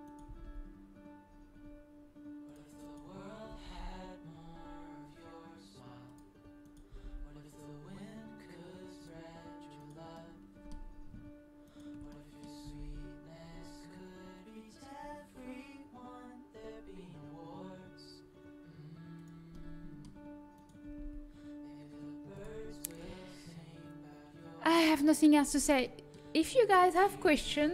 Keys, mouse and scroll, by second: 0.3 g, 3.4 g, 6.9 g, 10.1-12.6 middle drag, 12.6 g, 19.5-22.3 middle drag, 20.8 g.